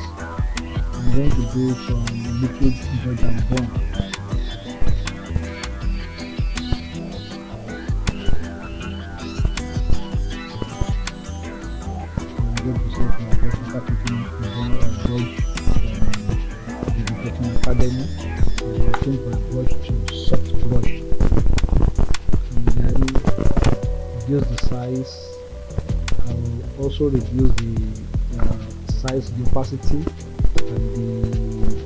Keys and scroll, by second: 24.6 ctrl+z.